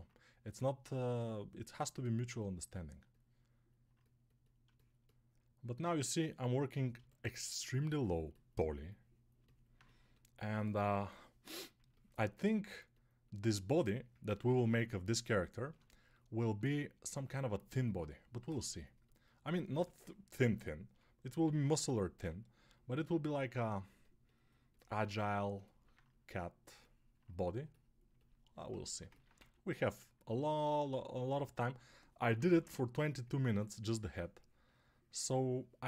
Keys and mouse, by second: 0.7-35.8 drag, 14.4 ctrl+r, 19.6 6, 22.0 g, 31.5 1, 32.2 [.